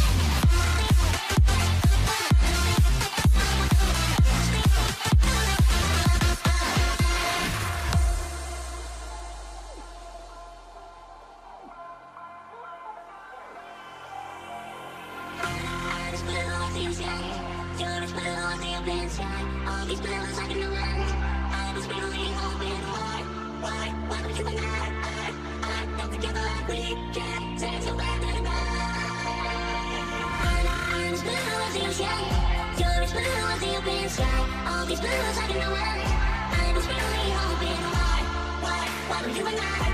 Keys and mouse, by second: 1.4 alt+a, 1.5 1, 3.0-5.3 ctrl+right drag, 5.9 f, 6.2 alt+a, 7.2 ctrl+s, 8.1 shift+middle click, 12.5 shift+middle click, 15.0 k, 18.2 k, 20.5 k, 23.2 k, 25.4 k, 28.8 k, 32.7 k, 35.9 k, 38.2 k.